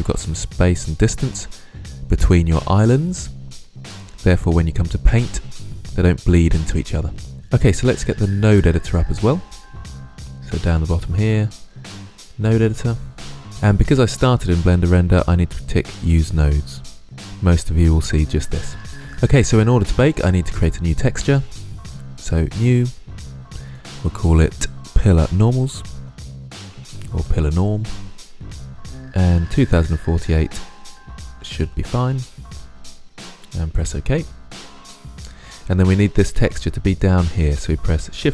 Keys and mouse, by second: 7.9-10.7 drag, 15.7-17.0 drag, 17.0-18.9 middle drag, 21.9-25.7 drag, 25.7 l, 28.3 click, 29.2-32.7 middle drag, 35.1-36.5 middle drag, 37.7 shift+a.